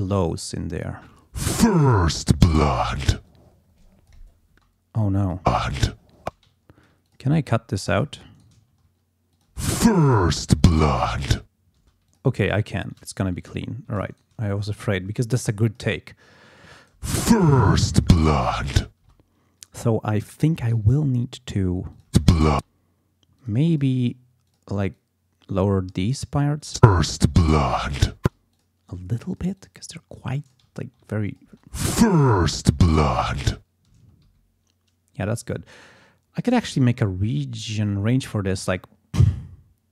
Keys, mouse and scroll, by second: 0.9 space, 3.3-4.3 drag, 4.5 space, 5.2 click, 5.4 space, 6.2 space, 6.6 ctrl+scroll up 2, 7.1 ctrl+click, 7.5 ctrl+s, 7.9 ctrl+click, 8.3 ctrl+shift+right click, 8.7 ctrl+shift+scroll down 2, 9.3 ctrl+click, 9.5 space, 9.7 ctrl+scroll up 2, 11.8 space, 12.1 click, 12.8 s, 13.1 ctrl+scroll down 2, 13.4 ctrl+click, 13.9 ctrl+s, 14.1 ctrl+shift+right click, 15.6 click, 16.9 space, 17.5 ctrl+scroll down 2, 18.4 ctrl+scroll up 2, 19.0 ctrl+space, 19.2 ctrl+scroll up 2, 19.7 ctrl+scroll down 2, 20.3 ctrl+scroll up 2, 20.7 ctrl+d, 21.9 click, 22.1 space, 23.4 click, 23.7 click, 24.5 click, 24.9-26.1 drag, 26.3 click, 26.6 click, 26.7 space, 28.2 space, 28.5 click, 29.3 click, 30.1 click, 30.7 ctrl+scroll down 2, 31.3 ctrl+click, 31.5 ctrl+space, 33.9 space, 34.3 g, 37.7 click.